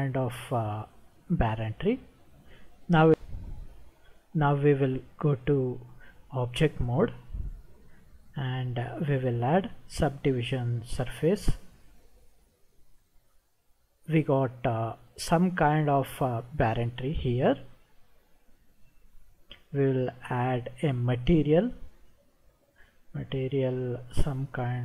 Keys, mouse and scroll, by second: 3.1 ctrl+1, 6.5 Tab, 8.6-11.1 drag, 13.7-19.0 middle drag, 20.5 click, 23.7-24.0 drag.